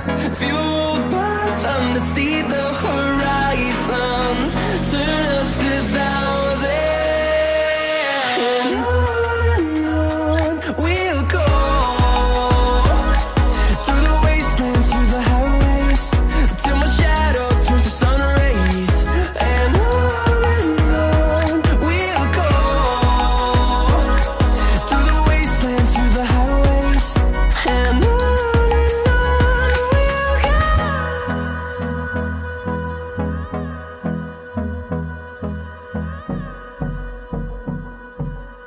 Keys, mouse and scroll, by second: 0.7 scroll up 1, 2.3 click, 3.2 scroll down 1, 4.3-6.5 drag, 6.5 ctrl+right click, 8.3 ctrl+r, 9.7 scroll down 1, 10.3 scroll up 1, 12.3 click, 12.9 right click, 15.7 right click, 16.6 click, 20.6 Delete, 21.1 scroll down 1, 22.7 click, 23.9 Delete, 24.4 scroll down 1, 25.2 click, 25.5 right click, 26.5 click, 27.4 right click, 27.6 right click, 29.7 click, 32.0 scroll up 1, 34.7 scroll down 1, 36.0 click, 36.6 right click, 37.5 click, 37.5 click, 38.5 right click.